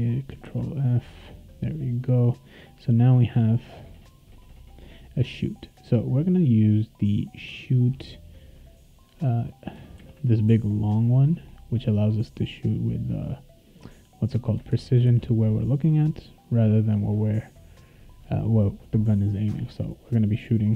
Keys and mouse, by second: 0.4 ctrl+f, 7.6-9.7 drag, 9.9 ctrl+c, 14.0 click, 14.7 ctrl+v, 15.0 ctrl+s, 16.1 click, 17.7 click.